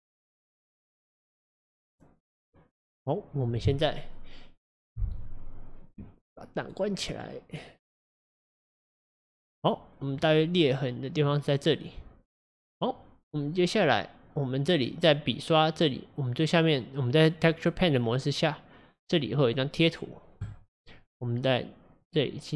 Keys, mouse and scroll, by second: 0.5-0.8 scroll down 1, 0.8-3.8 middle drag, 7.0-7.8 scroll up 1, 7.8-8.9 scroll down 2, 8.9 click, 10.2-14.9 middle drag, 20.4 click, 22.0-22.5 drag.